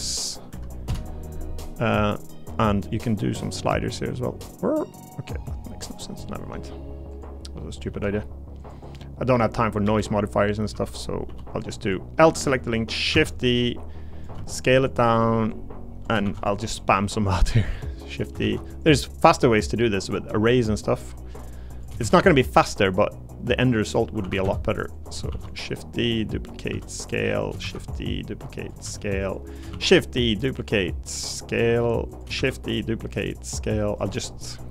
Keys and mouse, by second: 2.8 click, 3.7-6.0 drag, 7.9 g, 9.8-13.1 typing, 10.9 click, 11.6 click, 13.7 click, 14.3 s, 14.9 click, 16.2 shift+d, 16.8 click, 17.9 click, 18.4 ctrl+z, 19.4-21.4 drag, 22.0 shift+d, 23.0 click, 24.2 r, 24.4 z, 24.9 click, 25.3 shift+d, 26.7 s, 27.6 shift+d, 27.8 click, 28.8 s, 29.7 shift+d, 30.6 click, 31.6 s, 32.1 click, 32.4 shift+d, 34.0 s, 34.5 click.